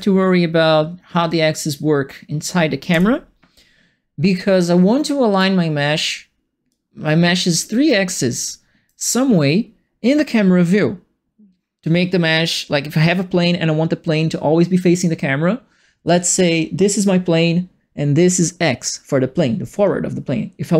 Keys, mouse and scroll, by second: 2.9 Delete, 4.3-5.3 right drag, 6.7 click, 8.4 right click.